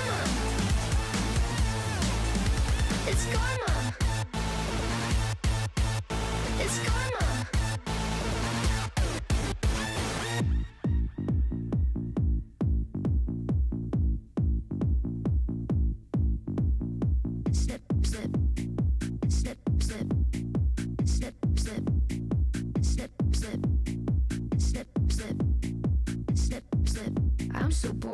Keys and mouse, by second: 5.4 click, 6.7 ctrl+s, 7.2 z, 8.0 click, 8.8 shift+drag, 9.9 shift+drag, 11.7-12.6 right drag, 12.6 click, 13.9 shift+click, 14.5 shift+click, 15.0 z, 17.9-19.4 drag, 23.3-24.8 drag, 27.6 click.